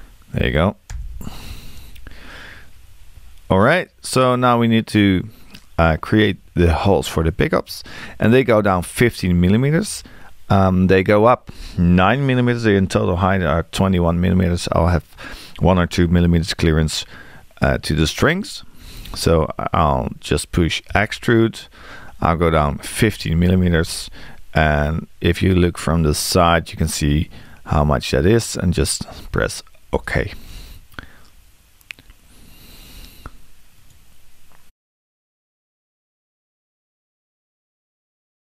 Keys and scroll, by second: 20.9 e.